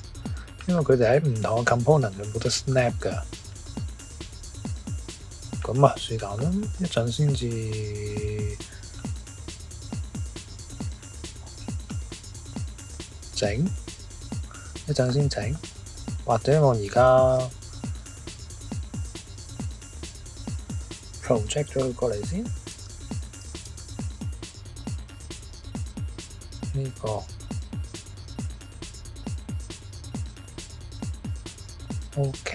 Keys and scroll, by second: 17.3 s, 22.3-24.3 typing, 25.0 Return.